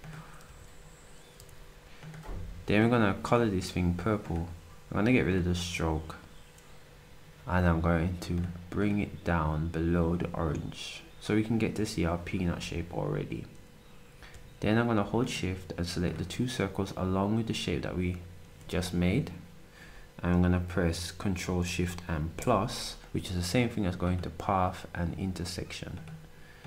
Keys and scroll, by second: 0.4 a.